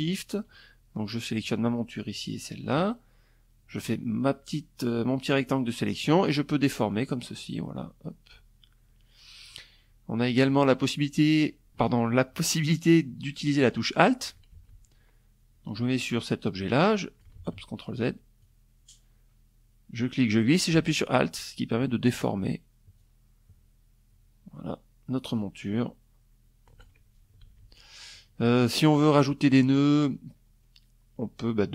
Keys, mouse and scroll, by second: 0.7 shift+click, 2.2-4.1 drag, 5.4-9.2 drag, 13.0 ctrl+z, 14.5-15.9 drag, 15.9 ctrl+z, 17.0-25.5 drag, 26.0 ctrl+z, 26.9 click, 27.7 click, 30.3 click, 31.3 click.